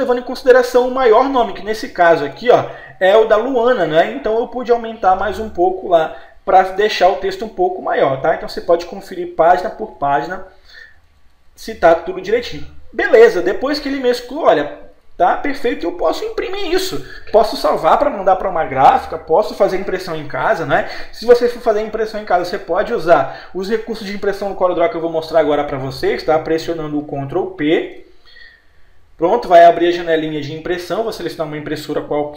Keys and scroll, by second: 0.7 Right, 2.4 Page_Up, 3.9 Page_Down, 5.7 Escape, 6.1 Page_Up, 8.6 Page_Down, 9.6 Page_Up, 10.3 Page_Down, 10.8 Page_Up, 27.9 ctrl+p.